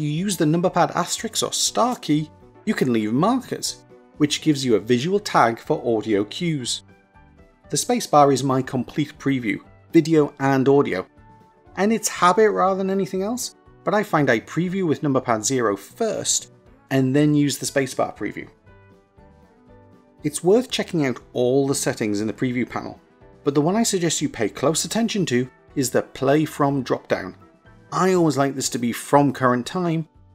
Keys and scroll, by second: 0.6 KP_Multiply, 2.0 KP_Multiply, 3.7 KP_Multiply, 5.2 KP_Multiply, 7.2 KP_Multiply, 7.9 space.